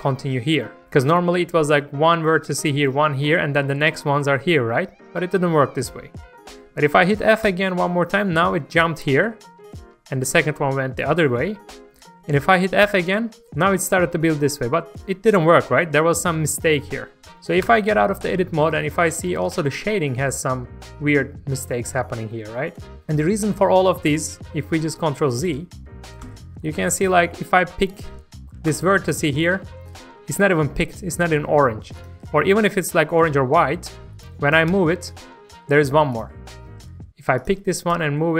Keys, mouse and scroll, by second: 17.7 Tab, 18.6-24.1 middle drag, 24.1-24.6 scroll down 1, 24.8 ctrl+z, 25.0 ctrl+z, 25.2 ctrl+z, 25.5 ctrl+z, 26.2 ctrl+z, 26.6 shift+middle click, 28.7 click, 29.0 scroll up 1, 29.3 shift+middle click, 29.9-32.0 scroll up 1, 32.0 click, 34.7 g, 36.1 click, 37.9 g.